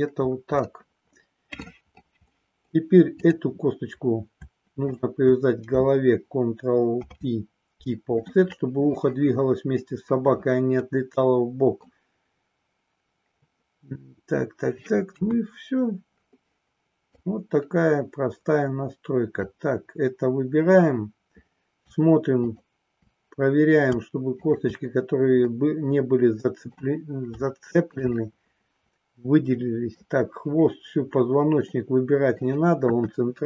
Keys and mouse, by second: 1.4 middle click, 2.3 middle click, 4.9 shift+click, 6.8 ctrl+p, 10.8-11.9 middle drag, 15.1 KP_1, 17.1-19.4 drag, 22.4 shift+click, 24.4 shift+click, 25.4-26.8 middle drag, 27.5 shift+middle click, 28.2-29.9 middle drag, 31.8 middle click, 32.8 KP_1.